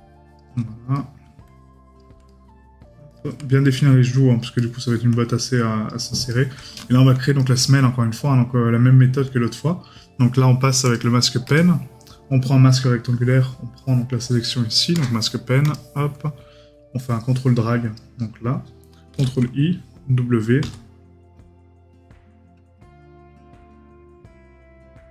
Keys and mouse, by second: 0.9 right click, 2.3 right click, 3.6 right click, 6.3 right click.